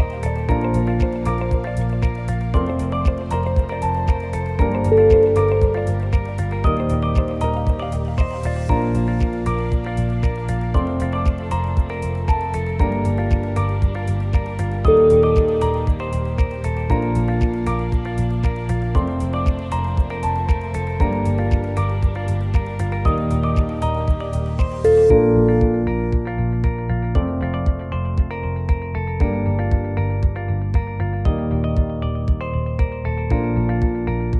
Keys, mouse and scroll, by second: 0.4 shift+click, 0.6 e, 2.2 s, 5.4 click, 7.8 click, 8.1 g, 10.1 click, 10.6 shift+click, 11.1 e, 12.3 s, 13.2 click, 13.6 g, 15.1 click, 15.4 shift+click, 15.8 e, 17.6 g, 18.5 click, 18.8 g, 20.9 ctrl+r, 22.7 click, 23.0 click, 23.4 g, 24.4 click, 24.8 g, 26.4 click, 26.8 g, 28.3 click, 28.8 g, 29.9 shift+middle click, 30.3 scroll up 1, 30.8 ctrl+r.